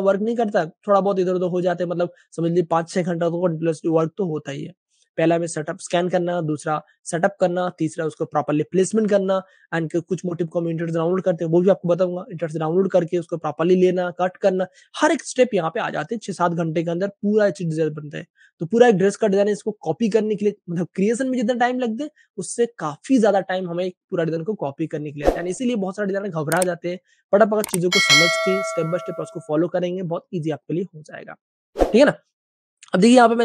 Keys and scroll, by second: 32.1 Page_Down.